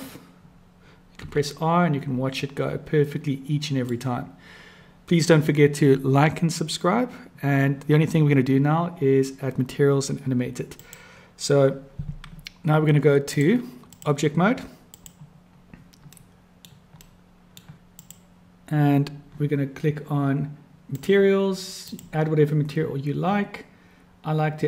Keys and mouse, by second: 1.2 r, 13.4-14.1 drag, 15.0 click, 16.1-16.7 drag, 16.1-16.7 right drag, 17.1-17.6 middle drag, 18.0 click, 20.7 click, 21.8-22.4 drag, 24.5-24.6 drag.